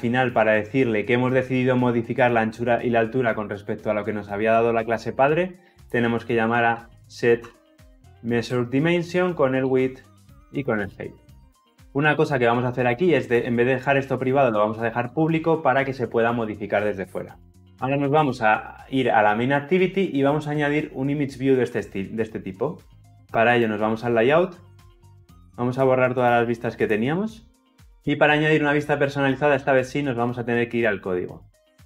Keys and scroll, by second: 8.2 Return, 11.5 ctrl+alt+l, 11.7 ctrl+alt+o.